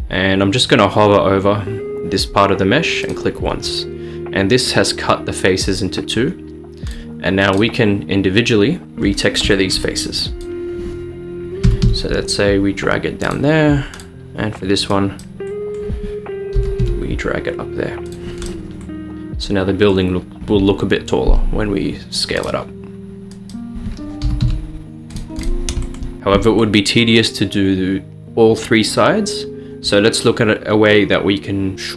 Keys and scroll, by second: 11.7 g, 11.9 y, 16.6 g, 24.3 g.